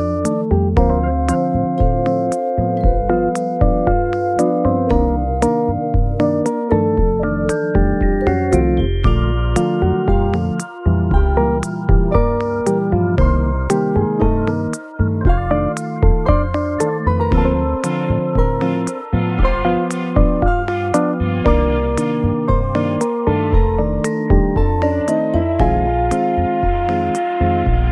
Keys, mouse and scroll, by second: 12.2-12.6 scroll up 2.